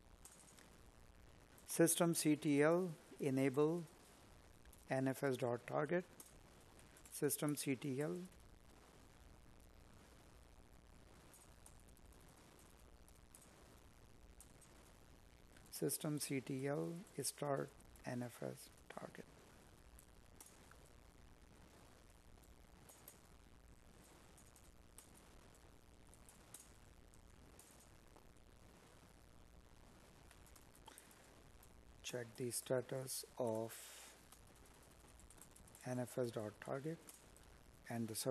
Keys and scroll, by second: 0.9 Up, 6.4 space, 7.3 space, 12.4 Up, 13.6 Left, 21.9 space, 23.2 space, 25.1 space.